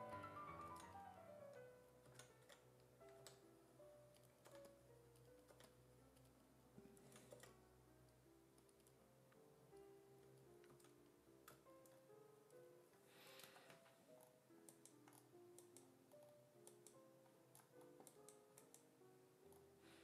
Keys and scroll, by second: 0.7 s, 2.1 s, 2.5 4, 3.2 2, 4.5 2, 5.5 4, 7.1 s, 7.4 5, 10.7 s.